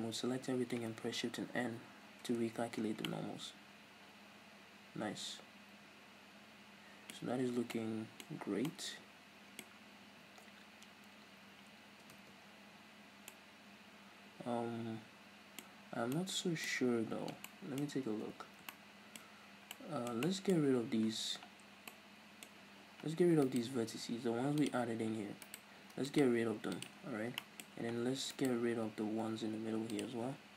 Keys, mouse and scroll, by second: 0.1 a, 1.6 shift+n, 2.2 Tab, 3.0 scroll down 2, 3.1-3.6 middle drag, 3.8 middle click, 4.4-15.8 middle drag, 7.2 Tab, 7.4 scroll up 1, 8.3-8.7 scroll up 2, 10.5-11.9 scroll up 2, 11.9 scroll up 1, 12.1 Tab, 12.5-13.3 scroll down 2, 15.8-16.2 scroll up 2, 16.2-22.6 middle drag, 16.8 scroll up 1, 18.1 Tab, 20.7-21.9 scroll up 2, 23.5 alt+right click, 23.9 x, 25.5 alt+right click, 26.1 click, 26.6 x, 27.4 middle click, 28.4 alt+right click, 28.9 x.